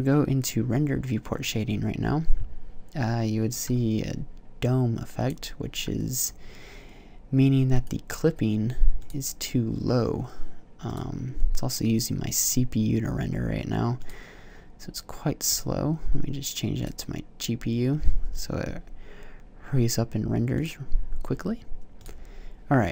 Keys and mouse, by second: 8.7 click, 8.8-9.7 middle drag, 9.7-11.5 right drag, 11.5-13.3 drag, 14.3-17.7 drag, 20.7-21.9 drag, 21.9 middle click, 22.2-22.9 drag.